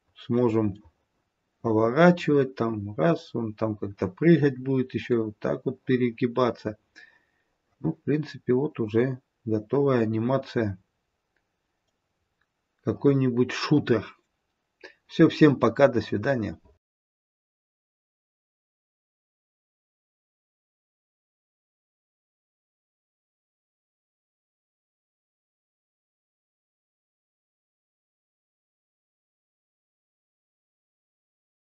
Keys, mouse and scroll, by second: 0.7 middle click, 12.2-15.4 scroll up 3.